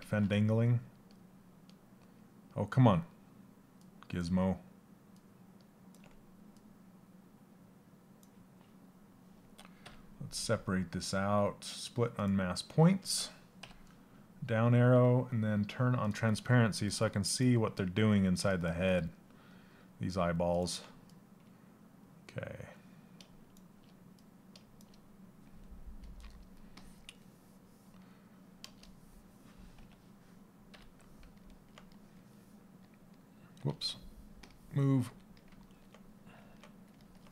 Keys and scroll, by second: 33.3 ctrl+z.